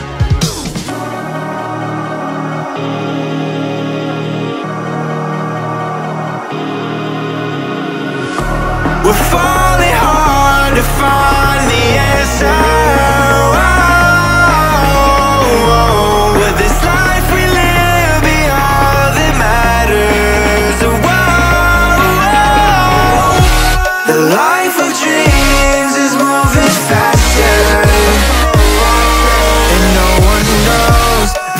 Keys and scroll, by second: 27.8 Down, 31.4 Down.